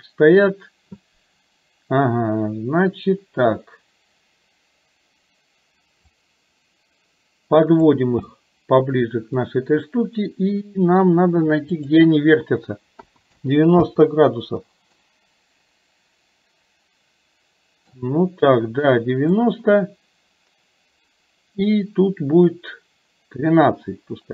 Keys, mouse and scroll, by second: 6.1-8.3 drag, 8.3-9.6 middle drag, 11.8-14.0 drag, 15.1-18.0 middle drag, 19.7-24.3 drag.